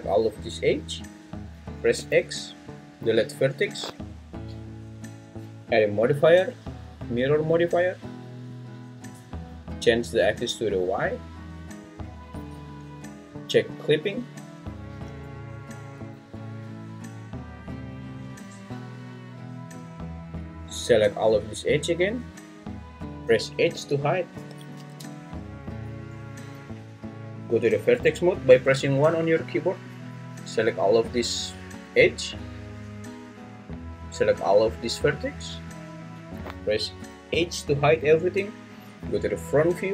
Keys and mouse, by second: 1.9 x, 6.2-8.5 drag, 11.8-16.4 drag, 18.9-20.4 drag, 20.5-23.0 drag, 23.7 h, 24.8 ctrl+z, 27.9 1, 29.8 click, 30.1-31.8 drag, 34.4-35.8 drag, 37.3 h, 39.0 1, 39.5 1, 39.6 1, 39.6 1.